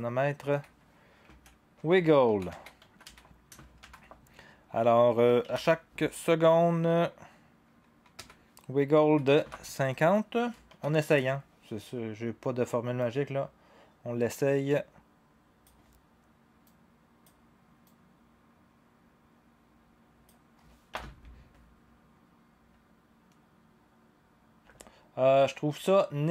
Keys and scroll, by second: 1.3-3.8 typing, 5.4 1, 8.7-9.5 typing, 10.7 ), 20.9 0, 24.6 0.